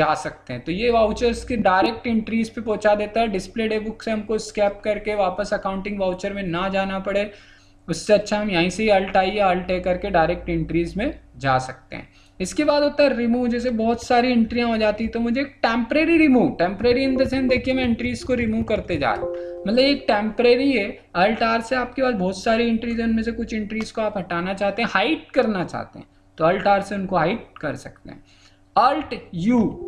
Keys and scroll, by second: 16.8 alt+r, 29.6 alt+u.